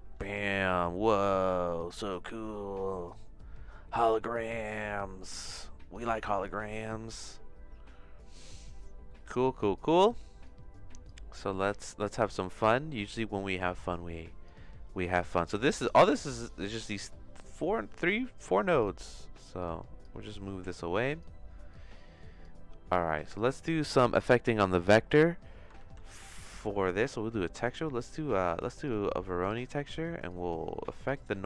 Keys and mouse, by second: 0.3-5.3 shift+middle drag, 6.1 middle click, 6.6 shift+middle click, 9.1 middle click, 9.7 click, 10.4 click, 11.6 click, 12.6 click, 13.9 click, 15.1 click, 16.1 middle click, 16.8 click, 17.4 click, 18.4 click, 19.6 click, 20.4 click, 21.7 click, 22.9 click, 23.8 click, 25.8 shift+a, 30.4 click.